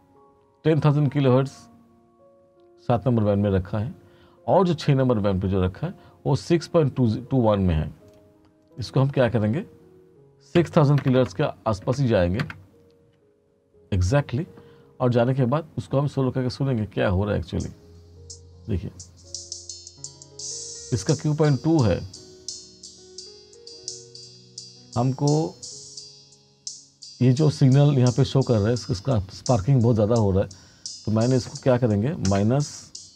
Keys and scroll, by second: 7.6-10.7 typing, 12.5 Return, 16.8 space, 32.4 -.